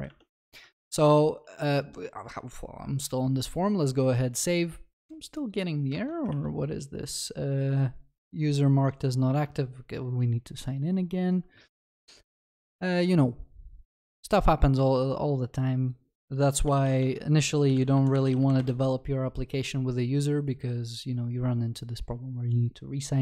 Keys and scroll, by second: 6.4 alt+F12.